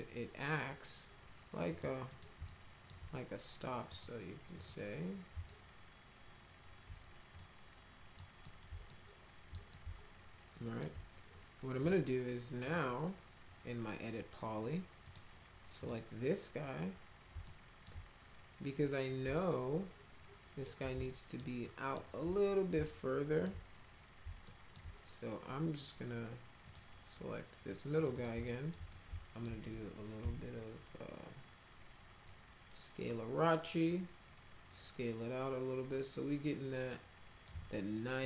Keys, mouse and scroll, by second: 1.7 click, 2.1 right click, 2.5 alt+middle click, 3.9 click, 4.5 click, 5.5-6.9 alt+middle drag, 7.4 middle click, 8.4 middle click, 8.9 alt+middle click, 9.7-10.8 alt+middle drag, 11.8 click, 12.7 click, 15.0 click, 15.8 click, 17.4 alt+middle click, 19.4-20.7 alt+middle drag, 21.0 alt+middle click, 21.7 alt+middle click, 22.8 alt+middle click, 24.5 alt+middle click, 26.7 click, 28.0 click, 28.1 click, 28.4 alt+middle click, 28.9 alt+middle click, 30.2 r, 32.2-37.4 drag, 37.7 alt+middle click.